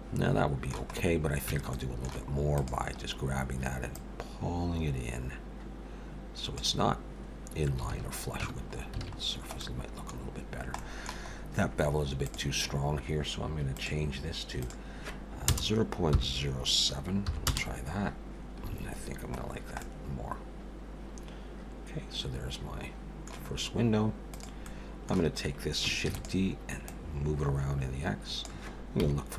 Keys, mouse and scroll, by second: 1.0-1.3 scroll up 2, 1.5 Tab, 1.7 middle click, 2.5 click, 3.0-3.9 scroll up 2, 4.0 click, 7.9 alt+a, 8.4 Tab, 9.2-9.6 scroll down 4, 9.6 middle click, 10.2-10.8 scroll down 1, 10.8 middle click, 10.8-11.3 scroll down 1, 11.3-11.9 scroll up 2, 12.2 click, 13.7 click, 18.7 alt+a, 19.0-19.9 scroll down 5, 19.8 middle click, 23.4-24.3 scroll up 2, 24.3 click, 24.3 scroll up 1, 24.6 middle click, 26.1 shift+d, 26.9 click, 29.0 KP_7.